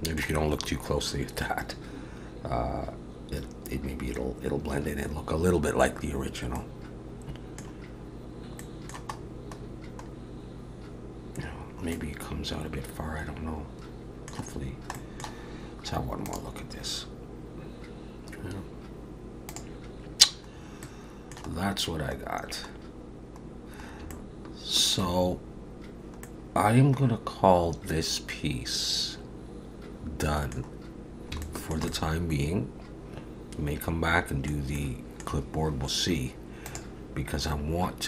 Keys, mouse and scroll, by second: 2.2 scroll up 1, 6.6 middle click, 8.6 middle click, 9.2-10.1 scroll up 4, 10.1-11.4 scroll up 3, 11.4 scroll down 1, 11.5-11.9 scroll down 2, 11.9 middle click, 14.5-14.9 scroll down 2, 15.0 middle click, 20.6 scroll up 2, 20.8 middle click, 21.6-22.2 scroll down 3, 22.8-23.5 scroll down 2, 23.5 scroll down 1, 24.1 shift+middle click, 25.2-26.2 scroll up 1, 26.2 middle click, 26.2 scroll up 2, 31.0-31.3 scroll down 3, 31.4 shift+middle click, 31.9 middle click, 34.8 middle click.